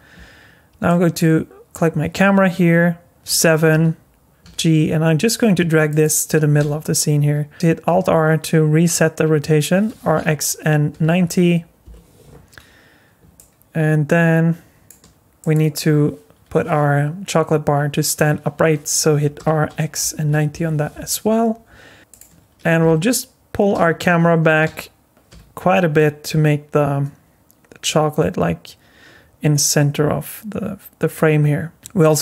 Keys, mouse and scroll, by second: 0.8 click, 3.2 KP_7, 4.4 g, 6.6 r, 7.9 alt+r, 9.9 r, 13.3 middle click, 15.4 click, 19.4 r, 23.7 g.